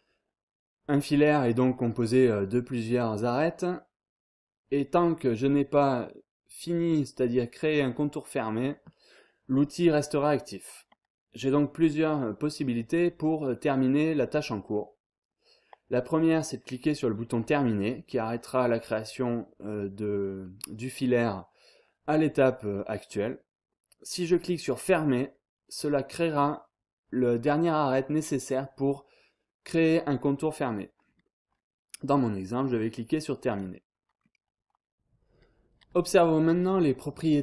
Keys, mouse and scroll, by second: 33.4 click, 34.2 scroll down 1, 34.5-34.9 scroll up 1.